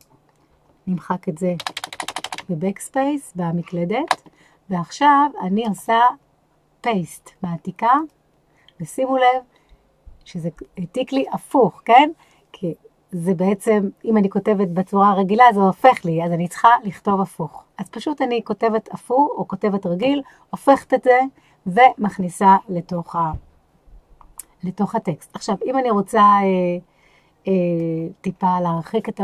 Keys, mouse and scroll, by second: 1.6-4.1 typing, 5.6-9.1 right drag, 27.9-28.4 scroll down 4.